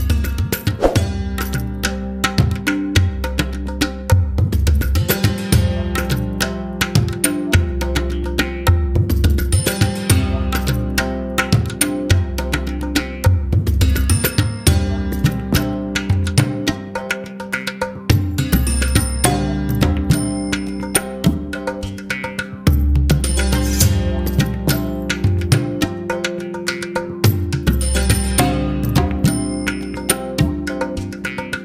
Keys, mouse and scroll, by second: 2.5 click, 7.0 x, 15.5 click, 28.8-31.6 drag.